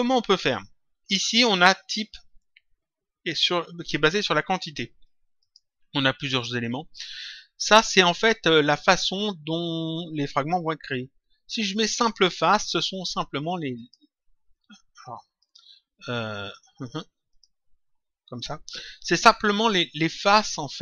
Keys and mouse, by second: 5.3 click, 11.8 click, 13.7 click, 15.3 click, 17.2 click.